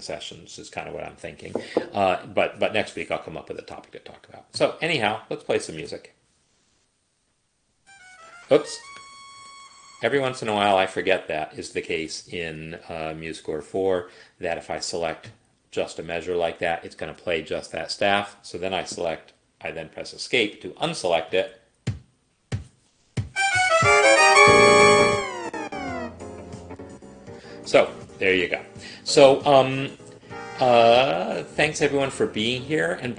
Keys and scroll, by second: 5.8 space, 9.6 Escape, 18.1 Escape, 21.3 space.